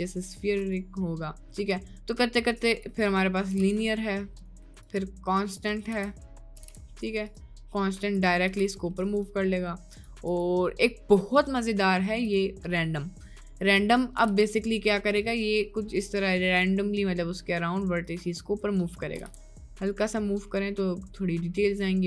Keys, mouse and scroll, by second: 3.6 g, 4.9 click, 5.9 z, 6.6 g, 8.5 g, 9.9 click, 10.4-12.7 drag, 13.7 middle click, 14.3 g, 18.4 middle click, 18.9 middle click, 19.3 g.